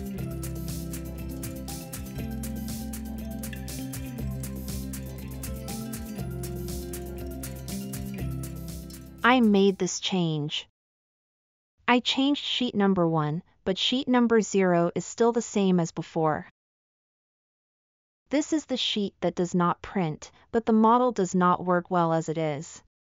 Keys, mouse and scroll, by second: 8.6-9.2 middle drag, 10.6-11.2 middle drag.